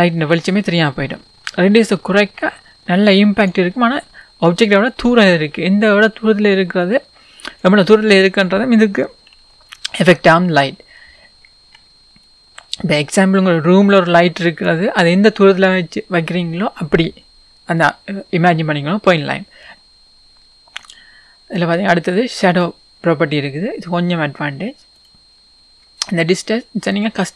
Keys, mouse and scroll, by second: 8.0-9.3 scroll up 1, 9.5-12.5 shift+middle drag, 10.6-11.3 scroll up 2, 11.3-12.2 scroll down 2, 12.2 scroll down 1, 12.5 click, 15.3-16.3 scroll up 1, 16.3-17.5 scroll down 1, 26.9 click.